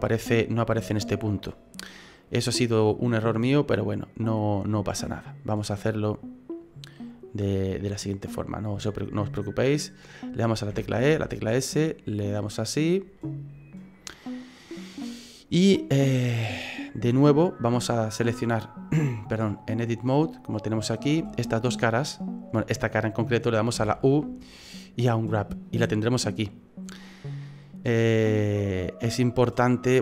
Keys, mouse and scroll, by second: 1.6-2.3 scroll down 2, 2.3-3.2 scroll up 3, 2.8 middle click, 10.7 e, 13.2 middle click, 16.2 right click, 19.4 click, 20.8 right click, 21.5 shift+right click, 23.8 u.